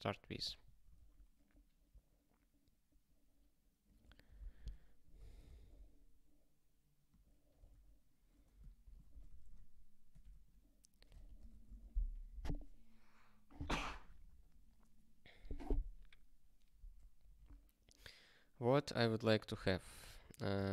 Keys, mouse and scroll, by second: 0.9 Return, 2.5 scroll up 1, 3.8 click, 4.2 Return, 4.4 ctrl+y, 5.1 Return, 5.4 ctrl+s, 7.0 click, 7.7 ctrl+f, 8.8-10.1 typing, 10.3 alt+/, 11.2 alt+^, 11.6 ctrl+s, 18.7 click, 20.6 ctrl+a.